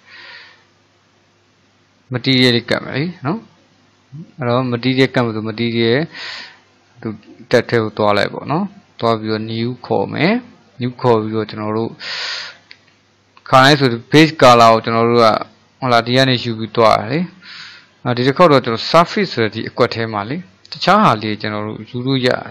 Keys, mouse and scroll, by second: 0.8-3.9 middle drag, 6.1 drag, 9.3-12.3 drag, 20.8-22.5 drag.